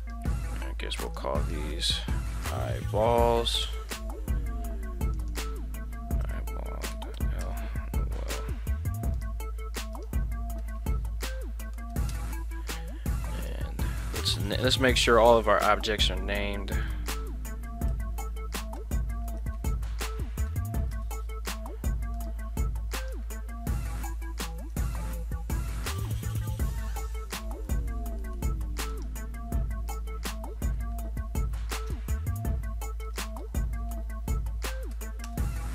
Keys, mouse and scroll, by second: 0.0 right click, 1.1-4.7 drag, 3.2 l, 5.1-8.6 drag, 8.4 ctrl+c, 9.2 right click, 9.9-12.7 drag, 13.4 right click, 14.5-21.7 drag, 22.2 right click, 23.0-27.0 drag, 27.6 shift+middle click, 28.2 shift+middle drag, 28.9 right click, 29.9-35.7 drag.